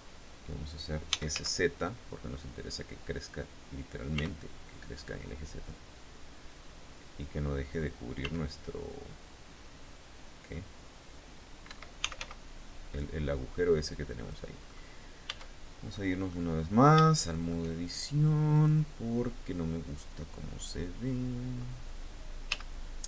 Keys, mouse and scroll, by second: 0.4-1.4 typing, 2.7 click, 3.7 r, 4.5 click, 6.0-7.5 drag, 7.8 s, 11.2 Escape, 11.3-12.3 typing, 13.8 click, 14.2 middle click, 14.8 Tab, 15.5 middle click, 16.0-16.5 scroll up 1, 16.6 shift+middle click, 18.1 right click, 22.0 z, 22.8 shift+middle click.